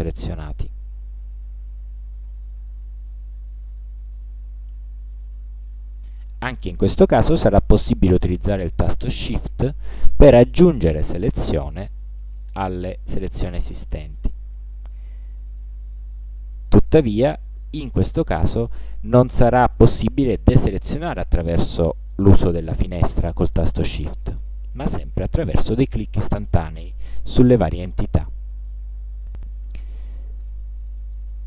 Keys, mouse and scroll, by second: 1.3-2.5 drag, 4.4-5.5 drag, 9.1-10.5 shift+drag, 12.5 shift+click, 14.7 shift+click, 17.4-18.5 shift+drag, 25.4 shift+click, 26.9 shift+click, 28.7 shift+click.